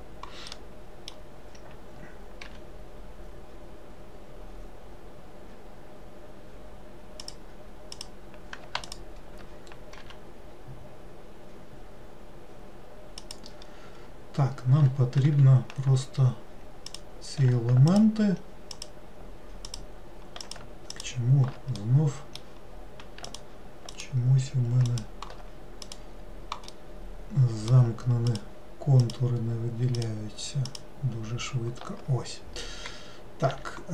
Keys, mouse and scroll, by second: 0.6-2.6 middle drag, 2.6 g, 8.1 click, 9.0 alt+click, 10.2 g, 17.0 click, 18.1 alt+click, 18.8 alt+click, 19.8 alt+click, 20.6 alt+click, 21.1 alt+click, 21.9-23.4 middle drag, 23.4 alt+click, 24.1 alt+click, 25.0 alt+click, 26.0 click, 26.9-28.4 middle drag, 28.4 alt+click, 29.2 alt+click, 30.1 alt+click, 30.8 alt+click, 33.7 e.